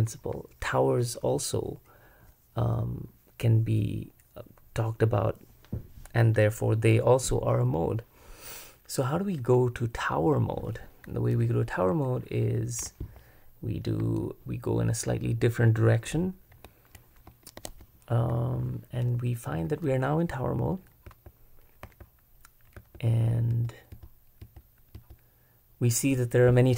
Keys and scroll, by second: 17.6 ctrl+Escape, 21.1-25.0 typing.